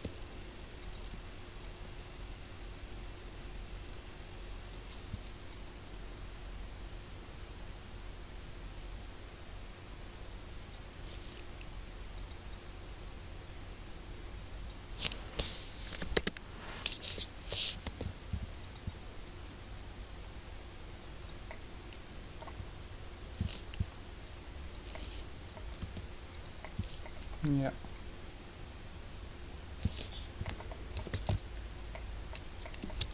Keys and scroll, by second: 15.7 Delete, 15.9 Return, 17.8 shift+g, 25.8 r, 31.1 alt+a.